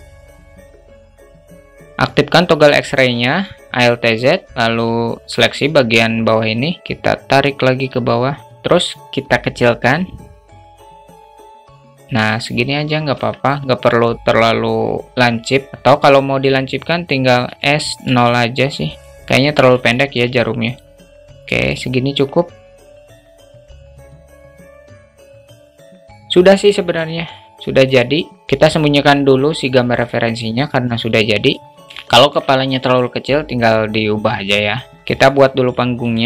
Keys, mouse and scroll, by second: 0.2 s, 0.2 `, 0.7 click, 0.8 alt+shift+middle click, 0.9 alt+z, 1.1 a, 3.1 alt+z, 3.7 click, 6.8-8.1 drag, 8.3 shift+middle click, 9.3 s, 12.6 Tab, 15.7 Tab, 15.7 shift+middle click, 16.1 alt+shift+middle click, 16.9 s, 19.1 Tab, 19.3 shift+middle click, 20.3 click, 21.1 Tab, 21.4-22.3 alt+middle drag, 23.0 g, 23.8 ctrl+z, 24.0 g, 24.4 `, 24.9 alt+z, 25.0 alt+shift+middle drag, 25.1 alt+z, 25.5 alt+shift+middle click, 29.4 click, 30.7-31.0 drag, 31.3 shift+middle drag, 31.7 alt+shift+middle drag, 34.1 click, 34.9 shift+a, 35.7 s.